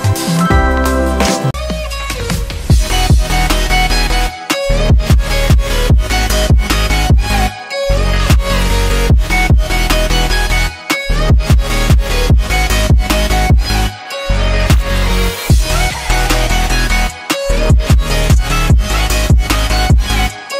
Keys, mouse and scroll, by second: 1.3 click.